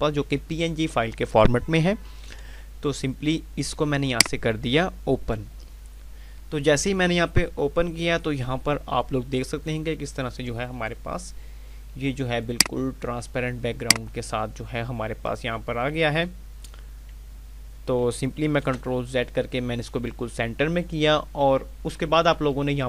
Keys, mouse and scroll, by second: 2.3 F5, 4.1 click, 12.4 click, 18.6 ctrl+z.